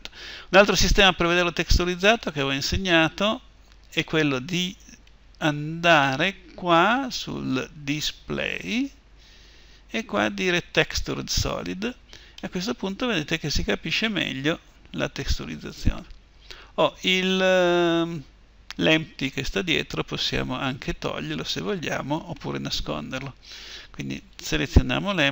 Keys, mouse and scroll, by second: 2.7-10.5 middle drag, 10.5-12.6 drag, 12.6-14.0 middle drag, 17.9 middle click, 24.0-25.3 right drag.